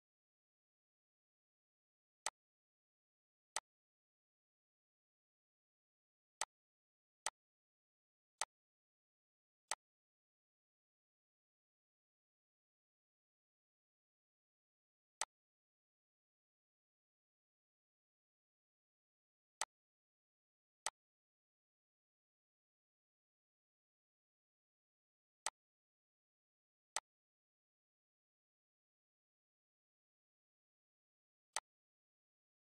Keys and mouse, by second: 1.3 click, 2.8 click, 5.6 click, 6.6 click, 8.2 click, 10.3 click, 12.0 click, 15.5 click, 17.0 click, 18.6 click, 22.3 click, 24.4 click.